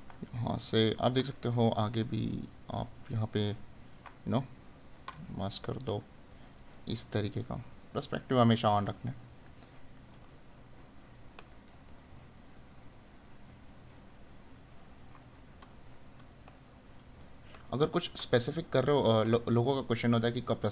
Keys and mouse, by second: 0.4 right click, 4.2 right click, 8.7 right click, 15.3 right click.